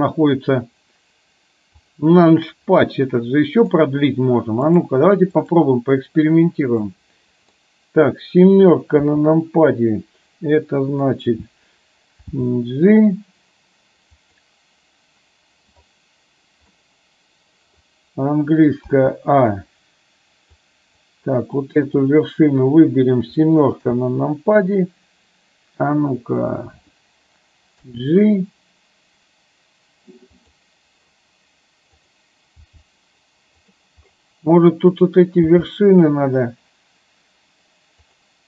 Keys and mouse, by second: 2.8 middle click, 4.9 click, 6.9 middle click, 9.1 KP_7, 12.4 g, 16.8 middle click, 19.1 a, 20.7 click, 22.2 click, 23.8 KP_7, 27.9 g, 32.7 g, 35.1 click, 35.5 g.